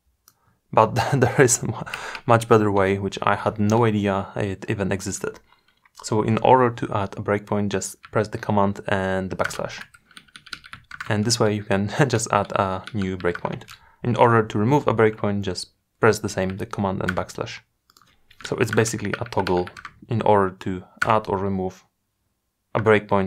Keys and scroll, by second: 8.4 super+\.